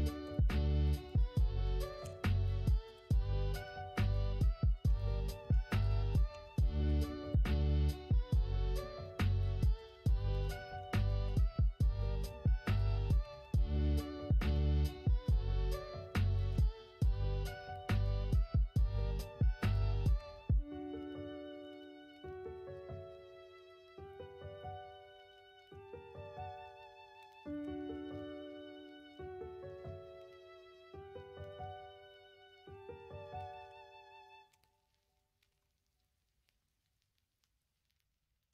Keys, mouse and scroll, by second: 4.9 middle click, 6.8 ctrl+r, 11.2 3, 11.9 middle click, 13.2 ctrl+r, 16.5 3, 16.9 middle click, 17.8 middle click, 19.0 ctrl+click, 19.6 middle click, 20.1 y, 23.1 middle click, 25.5 alt+z, 26.5 middle click, 27.6 y, 28.0 right click, 29.1 x, 30.0 middle click, 30.5 middle click, 33.6 l, 34.5 x, 35.4 alt+z, 36.0 middle click, 36.6 middle click, 37.3 middle click, 38.4 middle click.